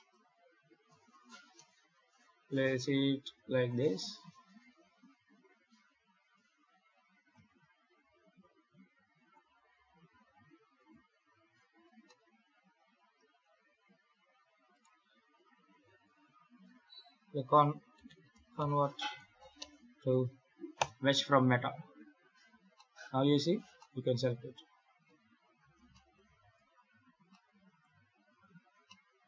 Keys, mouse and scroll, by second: 0.7 KP_7, 1.2 g, 4.5 shift+d, 7.3 shift+d, 10.0 alt+a, 10.8 ctrl+s, 11.9 middle click, 13.5 KP_7, 14.6 right click, 16.5 F3, 21.8 Tab, 22.6 middle click, 23.4 alt+a, 23.6 middle click, 24.9 KP_7, 25.8 shift+middle click, 26.4 Tab, 27.2 middle click, 28.0 Tab, 28.7 middle click.